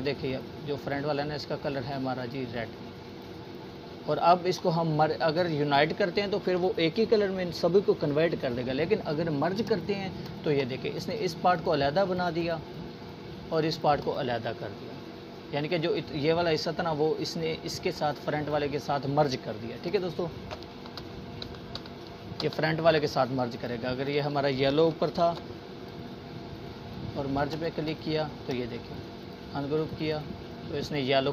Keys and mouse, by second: 6.2 click, 8.1 right click, 8.7-9.9 drag, 14.5-15.9 drag, 17.3 ctrl+z, 20.1 click, 21.9 ctrl+shift+], 22.4-23.7 drag, 25.7 right click, 26.4-27.6 drag, 30.1-31.3 drag.